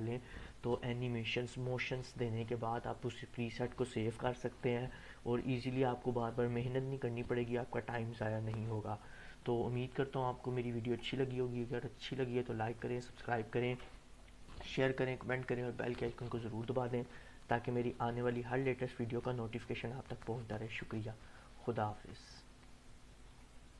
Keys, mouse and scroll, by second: 10.4-11.0 drag.